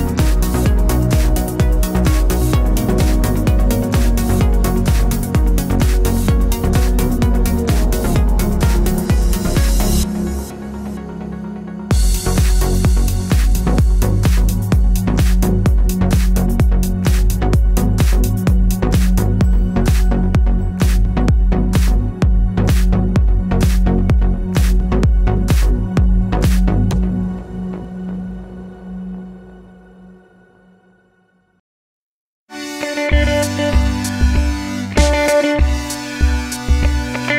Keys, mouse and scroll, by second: 1.5 click, 1.8 scroll up 1, 2.1-5.6 middle drag, 2.6 scroll down 2, 4.0 a, 5.6 click, 5.8 s, 6.7 click, 7.5 z, 8.2 ctrl+z, 8.6 scroll down 1, 9.1 click, 9.4 middle click, 9.9 click, 10.7 s, 14.2 middle click, 14.5-15.0 scroll down 2, 15.0 scroll up 2, 15.1 middle click, 16.4-17.4 scroll down 2, 17.4 s, 22.5-23.5 middle drag, 22.7 scroll down 1, 23.5 click, 26.2 click, 26.9-29.6 drag, 29.6-30.8 middle drag, 29.8 scroll down 1, 30.8-32.1 drag, 31.6 KP_Enter, 32.1-33.3 middle drag, 33.3-34.3 drag, 34.1 scroll up 2, 34.3-34.9 middle drag, 34.6 scroll down 1, 34.9 scroll up 1, 37.0 s.